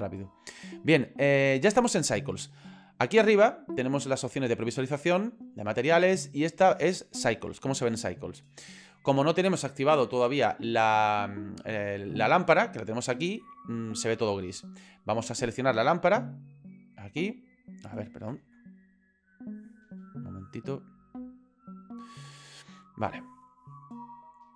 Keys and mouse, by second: 5.6 click, 17.1 middle click, 18.8 middle click, 19.3 middle click, 19.9 shift+middle click, 21.0 middle click, 22.5 click, 23.8 shift+middle click.